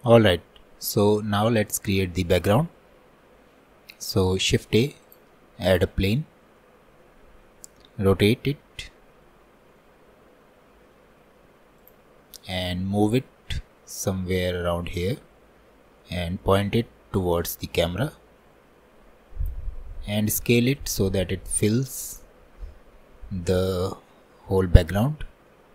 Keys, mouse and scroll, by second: 0.0-0.3 scroll up 5, 1.4 shift+middle click, 1.8 scroll up 1, 2.3-3.7 middle drag, 3.7-4.3 scroll down 1, 4.3-5.0 scroll down 1, 5.8 shift+a, 8.3 r, 12.7 click, 14.4-14.7 scroll down 1, 16.3 click, 20.8 s, 24.4-24.9 scroll up 1, 25.2 s.